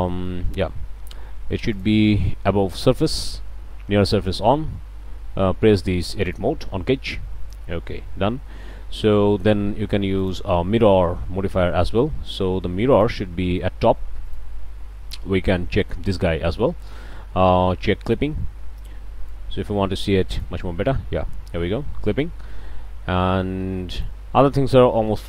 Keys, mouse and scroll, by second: 0.1 click, 1.7 click, 3.0 drag, 6.2 drag, 7.4-7.7 drag, 9.0 middle click, 10.2 drag, 12.9 click, 14.3 drag, 15.8 click, 18.0-18.3 drag, 19.3-20.6 drag.